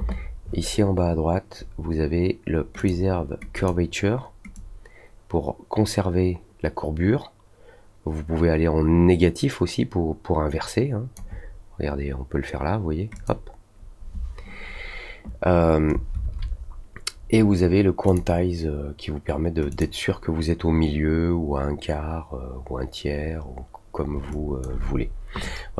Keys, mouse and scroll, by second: 2.7 click, 3.5 click, 4.5-11.1 drag, 13.1 click, 18.0 click, 19.6 click, 24.2 alt+click.